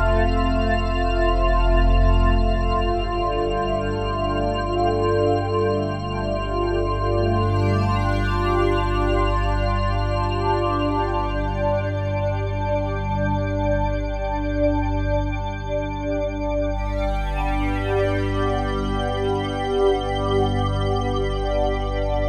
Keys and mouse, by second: 1.2-2.9 typing, 4.2-6.5 drag, 8.5 click, 9.0-14.6 drag, 15.2 ctrl+s, 16.7 click, 17.9 click, 19.4 ctrl+s, 20.8-22.2 drag.